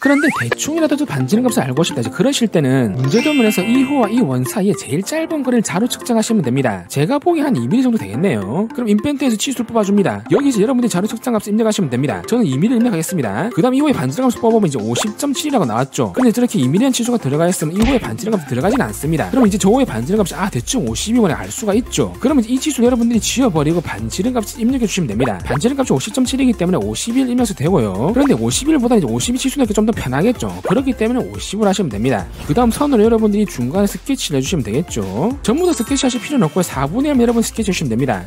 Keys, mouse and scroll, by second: 8.8 click, 9.7 click, 10.3 click, 12.6 2, 13.9 d, 14.5 click, 18.5 click, 22.9 click, 24.0 d, 24.4 click, 25.2 click, 29.7 5, 32.8 click, 33.6 click, 34.4 click, 35.1 click.